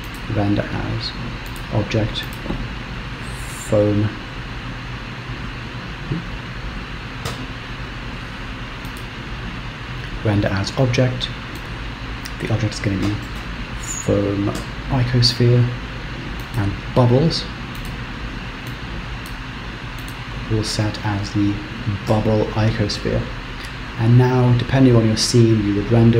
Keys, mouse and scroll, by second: 0.3 click, 2.4 click, 17.1 click, 17.9 click, 20.2 click, 21.6 b.